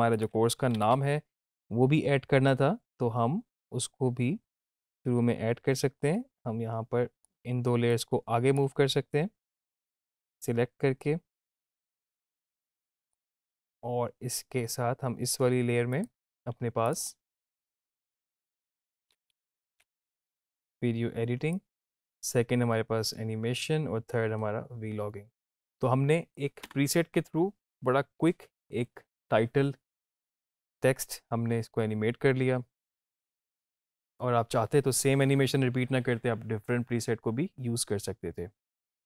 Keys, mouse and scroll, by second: 0.3 click, 4.8-7.3 drag, 12.1-13.3 drag, 21.8-26.6 drag, 26.6 space.